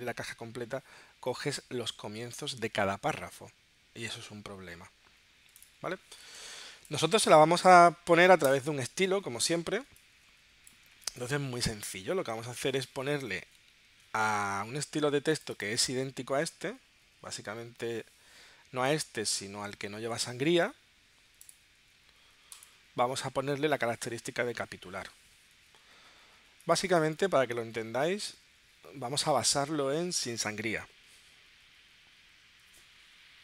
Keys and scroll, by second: 8.5 BackSpace.